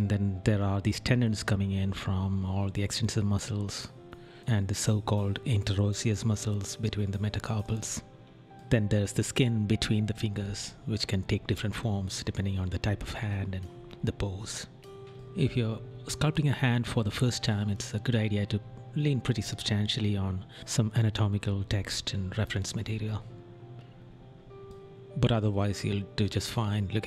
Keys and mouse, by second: 0.0 right click, 1.9 right click, 2.9 right click, 5.0 right click, 7.3 right click, 8.9 right click, 11.0 right click, 11.7 right click, 13.1 right click, 14.4 right click, 16.0 right click, 18.8 right click, 20.1 right click, 20.5 right click, 21.2 right click, 22.1 right click, 23.0 right click, 24.1 right click, 26.0 right click, 26.9 right click.